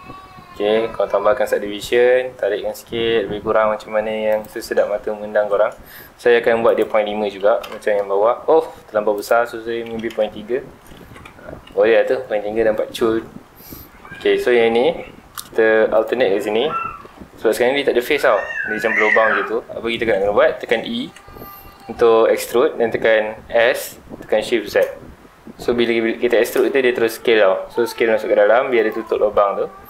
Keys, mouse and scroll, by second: 4.4 shift+click, 4.9 scroll down 2, 5.1-6.6 middle drag, 6.6-7.7 drag, 7.7 KP_Enter, 9.1-10.2 drag, 10.2 KP_Enter, 11.0 alt+a, 11.2 Tab, 11.4 scroll down 2, 11.6-12.0 middle drag, 12.0-12.3 scroll up 2, 12.3 middle drag, 12.6 scroll up 2, 12.9-13.3 middle drag, 13.3 scroll up 2, 13.4 Tab, 13.6 middle click, 14.1 2, 15.9 alt+click, 16.9 shift+middle click, 17.2 scroll up 1, 18.8 middle click, 19.5 scroll down 1, 19.8-21.0 middle drag, 21.0 e, 28.9 shift+click, 29.6 scroll down 1.